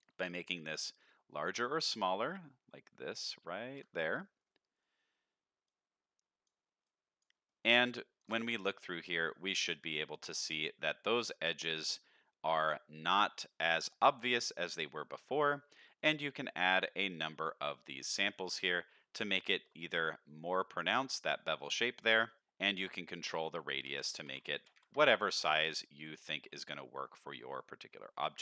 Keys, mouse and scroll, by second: 0.4-3.7 shift+drag, 4.2 middle click, 5.7 click, 6.8 click, 7.4 middle click, 8.2 ctrl+shift+click, 8.7 middle click, 9.2-9.5 scroll down 3, 9.6 alt+a, 9.8-10.2 middle drag, 10.4-10.7 scroll up 2, 10.7 middle click, 11.7 middle click, 12.5-13.8 middle drag, 13.9 shift+middle drag, 14.4-14.8 middle drag, 15.1-16.0 scroll up 1, 16.0 middle click, 16.3 middle click, 17.7 click, 18.0 click, 18.2 click, 18.6 click, 19.3 shift+middle drag, 19.8-21.3 scroll up 1, 21.3-22.0 scroll up 1, 22.0 click, 22.3 click, 23.4-24.9 drag, 25.8-26.1 middle drag, 26.3 alt+a, 26.7 middle click, 27.2 scroll down 2, 27.6-28.1 middle drag, 28.3 shift+middle drag.